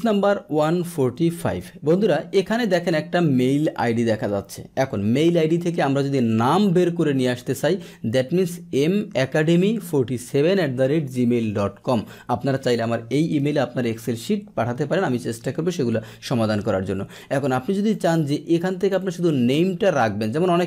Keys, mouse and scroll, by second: 17.8-18.8 drag, 20.5 click.